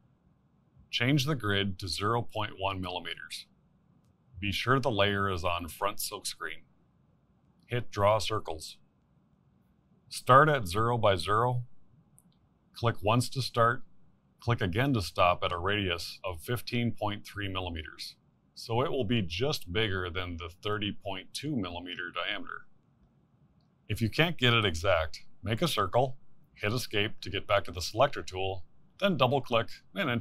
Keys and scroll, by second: 27.1 c.